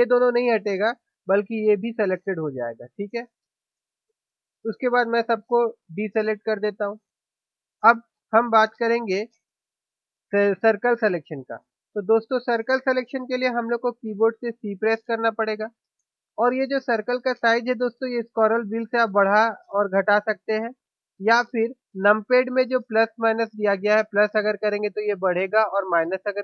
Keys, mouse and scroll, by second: 6.4 a, 15.0 c.